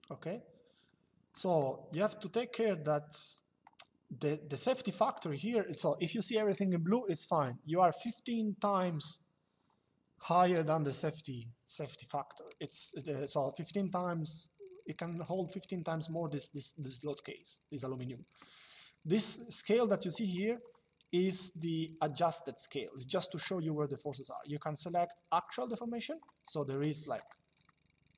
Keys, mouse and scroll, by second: 1.3 middle click, 2.6 click, 19.5 click, 24.0 click, 25.3 click, 27.4 shift+middle click.